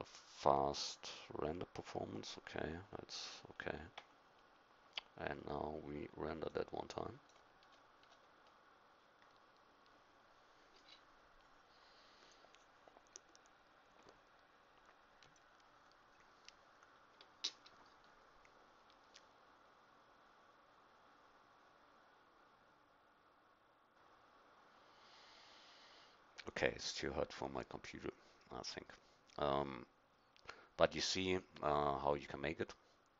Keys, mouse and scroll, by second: 4.2 F12, 7.3-10.9 drag.